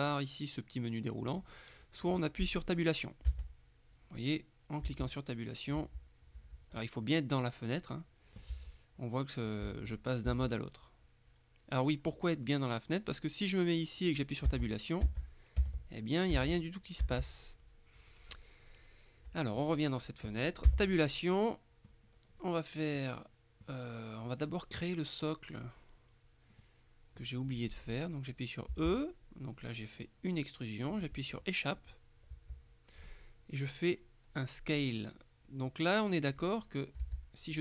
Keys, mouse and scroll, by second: 1.4 click, 3.4 Tab, 4.9 Tab, 5.9 Tab, 8.6 Tab, 9.7 Tab, 14.6 Tab, 15.7 Tab, 16.4 Tab, 17.1 Tab, 20.7 Tab, 21.2-22.2 drag, 23.0-24.2 drag, 26.7-27.8 drag, 28.8 e, 32.4 Escape, 37.1 g.